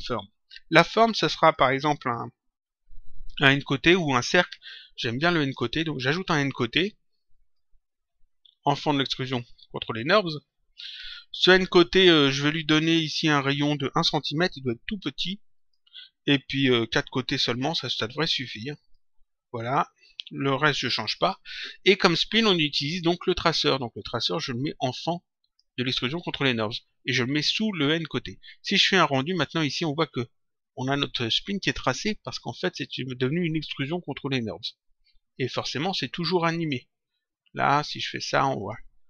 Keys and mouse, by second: 1.5 click, 7.5 click, 11.6 click, 13.8 click, 15.4 click, 17.3 click, 18.7 click, 23.7 click, 29.4 click, 35.8 click, 37.6 click.